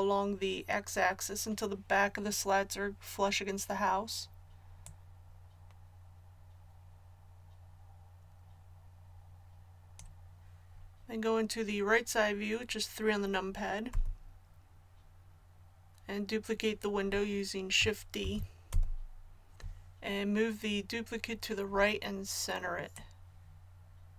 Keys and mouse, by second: 4.9-6.7 drag, 13.9 KP_3, 18.2 shift+d, 23.0-24.1 drag.